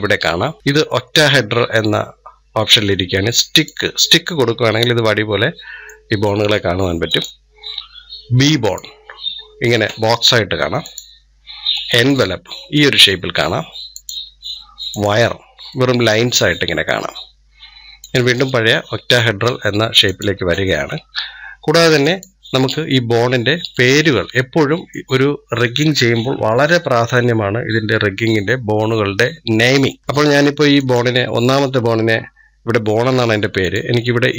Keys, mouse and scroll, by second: 4.5-6.9 middle drag, 6.9-15.5 drag, 15.5-17.8 middle drag, 17.8-20.9 drag, 21.9-23.6 drag, 23.6-26.6 middle drag, 30.6-34.3 drag.